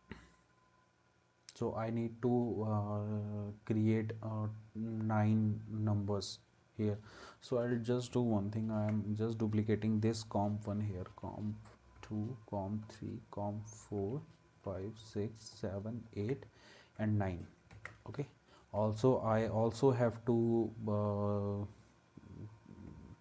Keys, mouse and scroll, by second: 11.1 ctrl+d, 14.0 ctrl+d, 17.8 ctrl+s.